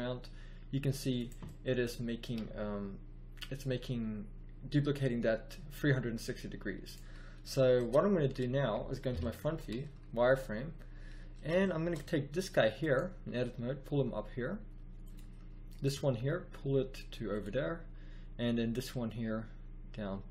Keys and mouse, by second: 1.4 click, 2.2 g, 7.4 middle click, 9.1 KP_1, 9.4 z, 13.3 g, 14.6 click, 14.9 click, 15.8 g, 18.8 g.